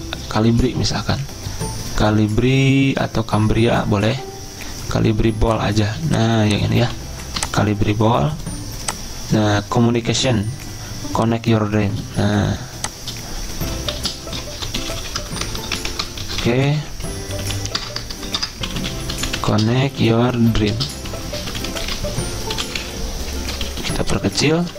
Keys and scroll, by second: 0.3-1.1 typing, 5.8-6.8 typing, 12.2 t, 13.7 Right, 14.3-24.7 typing, 15.8 Caps_Lock.